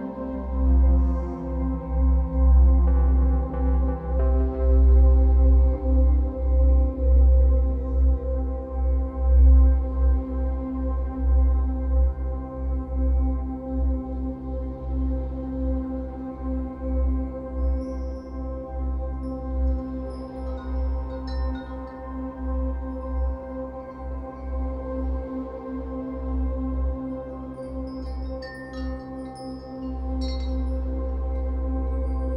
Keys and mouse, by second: 1.9 ctrl+alt+click, 2.4 alt+shift+click, 2.9 click, 4.3 i, 5.7 click, 10.6 i, 13.3 click, 14.1 ctrl+alt+shift+click, 14.9 typing, 15.2 ctrl+alt+click, 19.3 click, 21.3 click, 21.6 0, 21.9 Return, 22.5 i, 25.0 click, 26.8 ctrl+alt+shift+click, 27.3 alt+shift+click, 28.1 alt+shift+click, 29.0 click, 30.4 Right, 32.2 i.